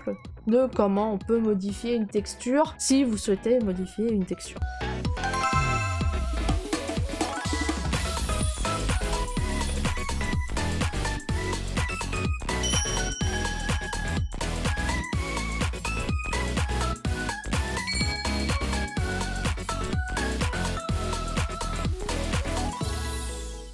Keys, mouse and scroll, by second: 2.7-3.9 scroll.